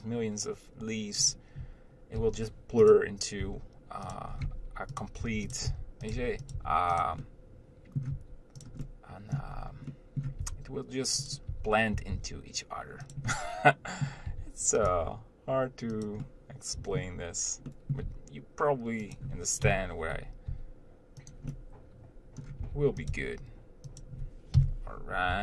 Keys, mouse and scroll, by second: 1.6 click, 2.4 shift+d, 3.7 r, 4.5 scroll up 1, 4.7 g, 5.5 r, 6.4 g, 6.8 r, 7.5 middle click, 8.3 r, 9.1 middle click, 9.8-10.2 scroll up 1, 10.2 middle click, 10.6 r, 11.7 r, 13.6 middle click, 14.5 r, 15.1 g, 16.5-18.3 middle drag, 18.3 g, 20.7 g, 21.8-22.8 middle drag, 22.8 r, 23.3 g.